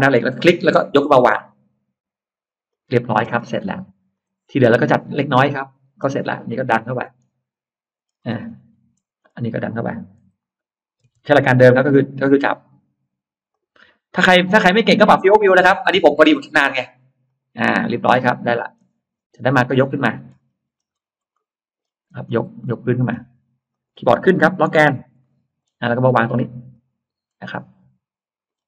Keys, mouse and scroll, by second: 0.1 click, 2.5 click, 3.1 space, 4.0 click, 4.6 scroll up 1, 5.1 middle click, 5.1 scroll up 1, 5.8-6.1 scroll up 2, 6.6 middle click, 7.8-9.1 scroll up 2, 11.5-12.2 scroll up 2, 11.5 m, 13.3 click, 17.1 click, 17.5 scroll up 1, 17.7 middle click, 18.7 scroll down 1, 19.3 middle click, 20.4-21.1 scroll up 1, 21.2 middle click, 21.9-22.5 scroll up 1, 22.5 middle click, 23.5 click, 24.9 Up, 25.1 middle click, 25.5-25.8 scroll up 1, 26.6 click, 27.1-27.5 scroll up 1, 27.3-28.3 middle drag, 28.3-28.6 scroll down 1.